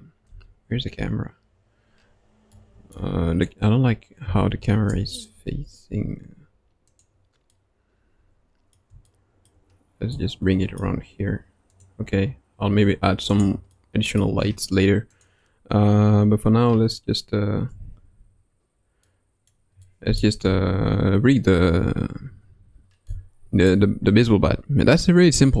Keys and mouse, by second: 0.2 KP_0, 2.5-2.9 middle drag, 4.2 n, 4.8 KP_0, 6.8 click, 7.5-8.8 middle drag, 9.1-9.5 shift+middle drag, 10.1-10.8 shift+middle drag, 13.3 click, 13.7-14.2 middle drag, 15.1 click, 17.6 KP_1, 19.0-19.5 middle drag, 19.8-20.2 middle drag, 22.2 KP_Decimal, 23.1-23.7 middle drag, 25.3 KP_1.